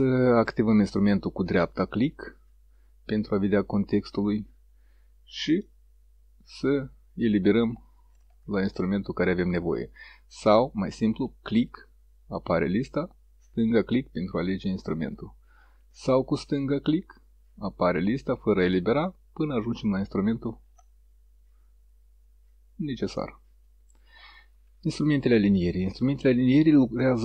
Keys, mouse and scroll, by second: 1.3-5.8 right drag, 11.3 right click, 13.7 click, 16.6-23.8 drag.